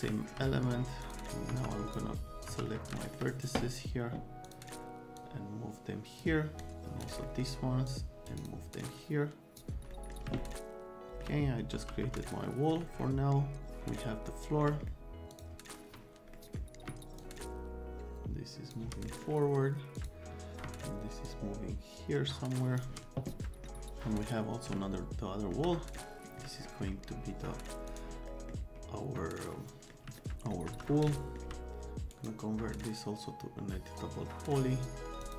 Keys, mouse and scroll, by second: 0.1 alt+click, 1.0 click, 1.5 F3, 1.7 click, 2.5 F3, 2.7 click, 2.9 alt+middle click, 4.4 middle click, 5.2-6.2 drag, 6.6 click, 7.2 right click, 7.9 click, 8.3 right click, 8.4 click, 8.7 click, 9.1 middle click, 9.9 middle click, 10.4 alt+middle click, 11.7 F3, 12.0 F3, 12.5 alt+middle click, 13.0-14.6 alt+middle drag, 14.9 middle click, 15.3 click, 16.4 click, 17.2-18.7 shift+drag, 19.1 click, 21.9 shift+click, 24.8 alt+middle click, 25.7 middle click, 26.5 middle click, 27.9 click, 28.3 middle click, 29.5 click, 30.2 alt+click, 30.5 click, 30.7 F3, 31.1 alt+click, 32.1 right click, 35.2 middle click.